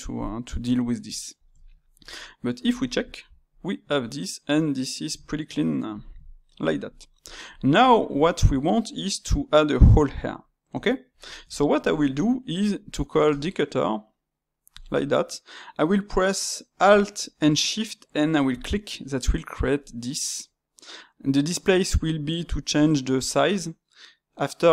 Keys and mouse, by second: 2.7 click, 3.2-5.9 middle drag, 5.9-6.4 drag, 6.4-13.2 ctrl+shift+middle drag, 13.2 space.